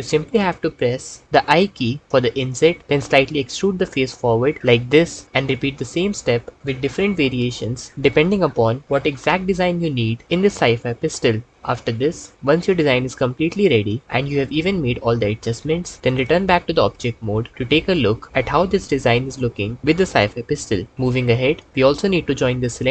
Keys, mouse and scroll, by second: 0.2 x, 2.1 i, 3.1 e, 5.2 i, 5.6 click, 7.1 e, 7.9 i, 8.9 e, 10.2 i, 11.5 e, 12.4 i, 13.7 click, 14.2 e, 17.0 Tab.